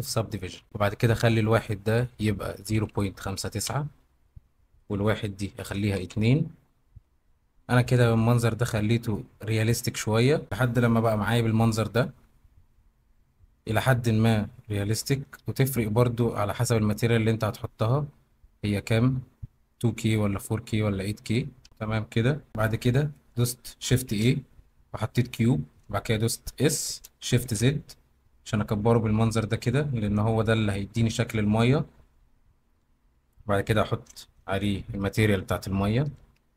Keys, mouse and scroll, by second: 1.4-3.6 middle drag, 4.8-6.0 middle drag, 10.4 z, 11.7-13.1 middle drag, 13.7-14.7 middle drag, 15.4 shift+middle click, 17.5-17.9 shift+middle drag, 19.8-20.4 middle drag, 21.6 middle click, 22.5 middle drag, 22.5 z, 24.1 shift+a, 26.6 s, 27.4 shift+z, 34.0-35.4 middle drag.